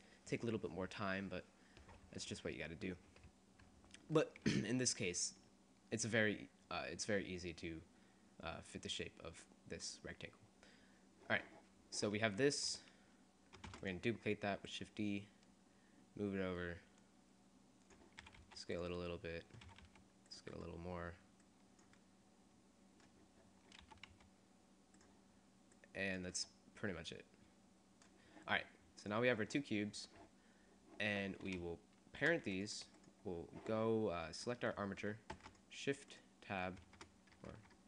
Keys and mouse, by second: 4.3 middle click, 5.5 middle click, 10.6-13.5 drag, 13.8 shift+d, 14.0 click, 16.4-18.2 middle drag, 18.4 s, 19.8 click, 19.8 s, 21.4 click, 24.1 s, 25.9-27.7 drag, 29.1-30.9 right drag, 32.7-34.9 drag, 35.5 shift+Tab, 36.9 shift+Tab, 37.7 ctrl+Tab.